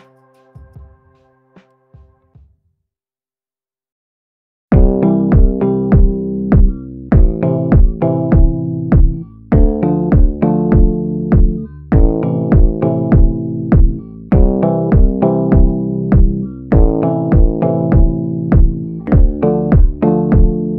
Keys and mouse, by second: 0.7 a, 1.8 middle click, 3.2-5.9 middle drag, 6.3 middle click, 8.6-11.1 middle drag, 12.4 middle click, 13.0 shift+middle click, 14.8-16.5 typing, 15.0 click, 15.4 ctrl+z, 15.8 click, 16.4 ctrl+z, 16.7 click, 17.0 ctrl+z, 17.3-18.3 drag, 18.3 ctrl+z, 18.4 ctrl+z, 19.1 click, 19.7 click, 20.6 click.